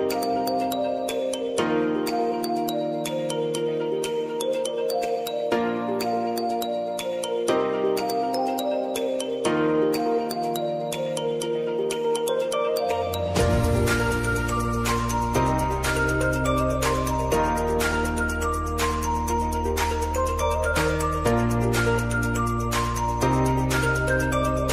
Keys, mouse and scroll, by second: 2.5 ctrl+n, 3.0-4.0 typing, 5.3 click, 16.0 Return, 16.8-18.6 drag, 19.3 ctrl+a, 20.7 ctrl+alt+Home, 22.4 click.